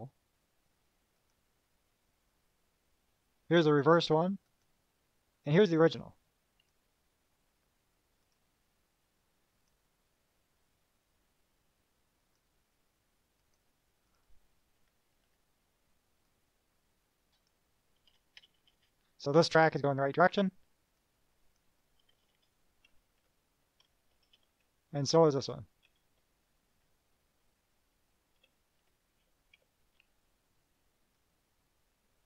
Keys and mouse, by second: 1.4 click, 5.6 click, 6.8 right click, 8.4 click, 9.7 click, 12.4 click, 13.6 click, 14.3 click, 14.9 -, 16.5-17.8 drag, 19.8 KP_Subtract, 21.2 click, 22.3 KP_Add, 23.2 Down, 24.3 KP_Add, 25.1 Down, 26.0 Right, 26.9 Up, 27.6 Left, 28.3 Right, 29.0 Up, 29.4 Down, 31.4-32.2 drag.